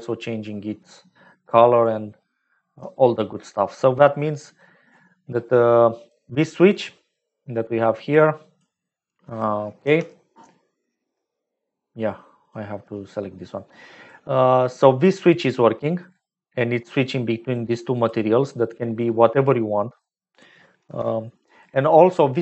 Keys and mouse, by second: 3.9 click, 4.3 click, 6.0 click, 8.0 click, 9.7 Home, 11.1-12.4 right drag, 14.0 click, 15.2 click, 16.5 middle click, 17.5 click, 18.4 middle click, 19.8 click, 20.7 Home.